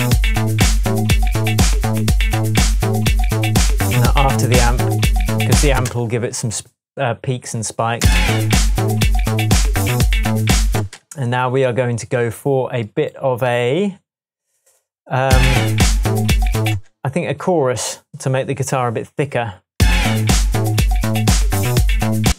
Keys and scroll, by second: 5.7 space, 8.0 space, 10.7 space, 15.2 space, 16.7 space, 19.7 space, 22.2 space.